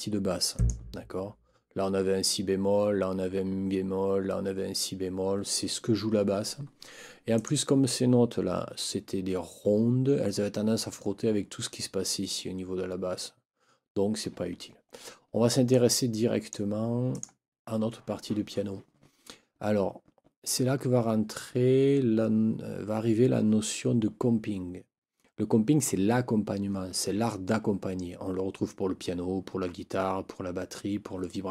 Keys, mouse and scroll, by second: 0.5 click, 7.3 click, 14.9 ctrl+scroll up 2, 15.7 ctrl+click, 17.1 click.